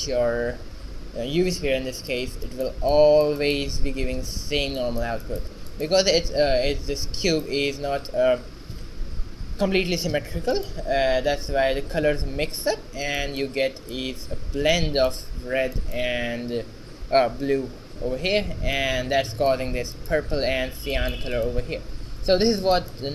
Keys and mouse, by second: 4.9-10.5 middle drag, 10.7-13.1 right drag, 11.3 r, 13.5 middle click, 21.5-23.1 right drag, 22.0 alt+r.